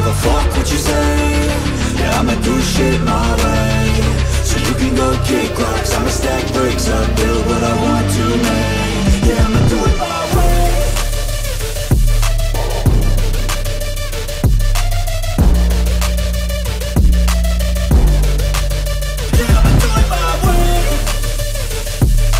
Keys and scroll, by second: 7.6 x, 14.2 x.